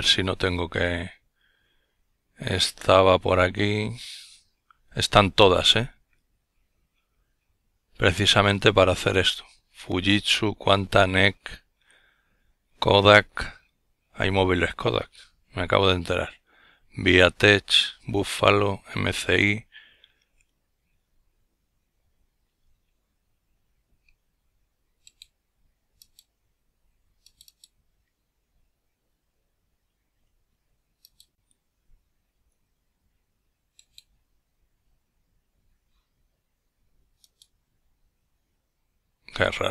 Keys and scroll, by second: 36.4 ctrl+f.